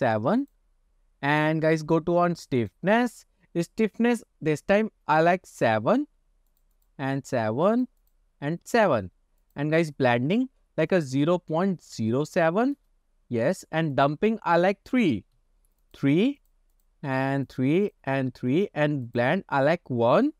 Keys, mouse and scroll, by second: 0.5-0.8 drag, 1.7-2.8 scroll down 2, 2.8-9.2 drag, 9.5-13.2 drag, 14.0-16.6 drag, 16.8 click, 17.9 click, 19.2-20.3 drag.